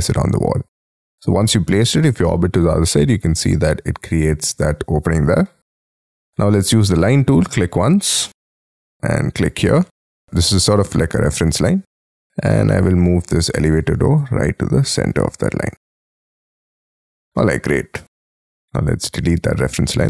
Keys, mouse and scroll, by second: 1.4 middle click, 2.3 middle click, 6.5 l, 9.4 shift+click, 9.8 space, 12.5 m, 15.3 shift+click, 15.9 space, 16.5 middle click, 17.3 middle click, 18.0 middle click.